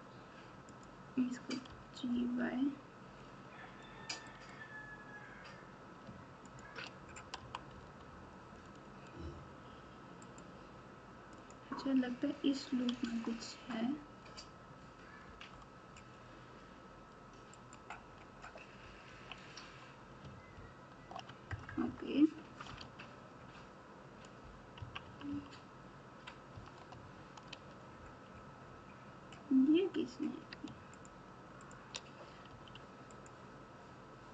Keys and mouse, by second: 1.6 g, 6.5 shift+click, 7.3 g, 11.4 click, 13.0 g, 19.1 KP_1, 20.5 ctrl+KP_8, 21.0 ctrl+KP_8, 21.5 KP_Add, 21.6 KP_Add, 22.7 alt+z, 24.7 KP_6, 25.0 KP_6, 26.5 KP_4, 27.5 alt+z, 30.9 shift+click, 31.6 shift+click, 32.4 x.